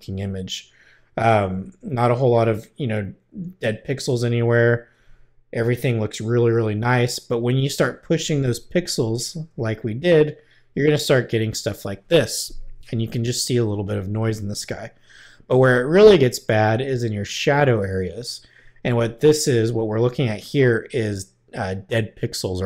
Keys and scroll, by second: 9.5 \.